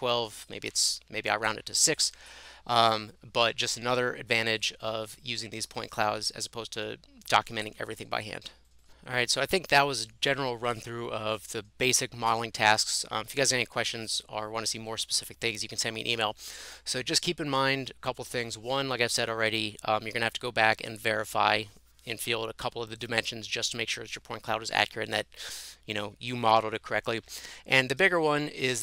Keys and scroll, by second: 0.6 Delete, 6.2 Escape.